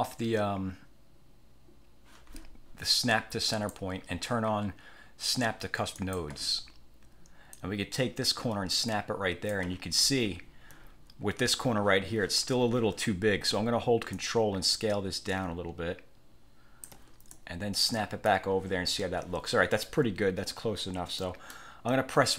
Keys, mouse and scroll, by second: 3.6 click, 6.1 click, 7.7-9.8 drag, 10.5 ctrl+scroll up 2, 14.3 ctrl+click, 17.4 ctrl+click, 21.3 middle click.